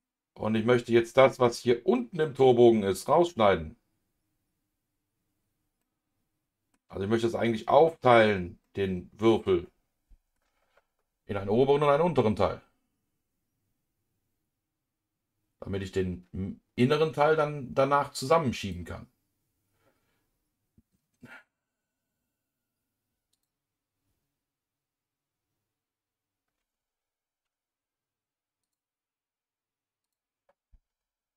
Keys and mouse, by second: 0.7 KP_Divide, 5.8 middle click, 8.6-10.3 middle drag, 12.2-15.8 middle drag, 18.6-24.0 drag, 28.6 click, 30.0 click.